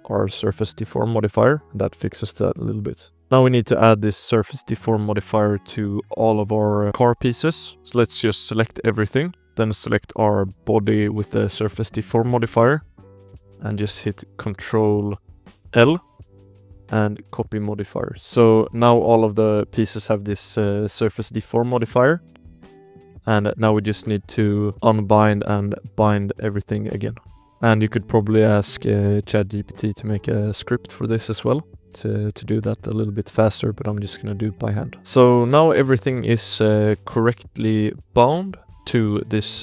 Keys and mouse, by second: 2.4 click, 3.4 click, 4.7 shift+click, 5.8 click, 6.9 click, 7.8 shift+middle click, 7.8 shift+z, 8.6 middle drag, 9.0 shift+middle drag, 10.2 shift+click, 11.9 shift+drag, 15.6 ctrl+l, 18.4 shift+drag, 18.8-19.3 drag, 19.6 click, 19.9 click, 21.2 shift+drag, 21.6 click, 22.1 click, 22.4 shift+drag, 23.0 drag, 23.4 shift+click, 24.8 click, 25.3 click, 26.1 click, 27.3 click, 27.5-28.2 shift+drag, 28.4 click, 28.8 click, 29.4 click, 29.7 click, 30.2 drag, 30.6 click, 31.4 click, 31.6 click, 31.9 click, 32.7 click, 32.9 click, 33.4 click, 33.8 click, 35.3 click, 35.7 click, 36.4 click, 36.7 click, 37.3 click, 38.3 click, 38.6 click, 39.1 click.